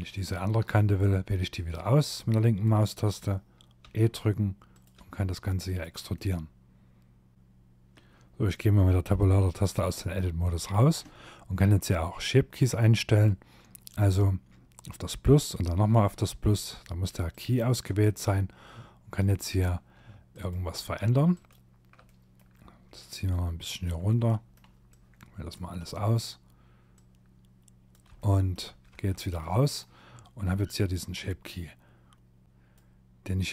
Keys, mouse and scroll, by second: 0.0 click, 2.8 e, 3.9 e, 5.1 middle click, 7.9 Tab, 8.4 middle click, 9.0 shift+middle click, 12.1 click, 14.3 click, 16.9 Tab, 17.4-18.1 scroll up 3, 18.5 click, 19.3 shift+click, 20.3 click, 21.0 middle click, 21.9 click, 23.1 middle click, 23.9 click, 24.8 middle click, 25.9 click, 27.2 shift+middle click, 27.9 Tab, 28.4 middle click, 29.6 scroll down 2, 30.2-30.9 scroll down 1, 32.4 click, 33.2 click.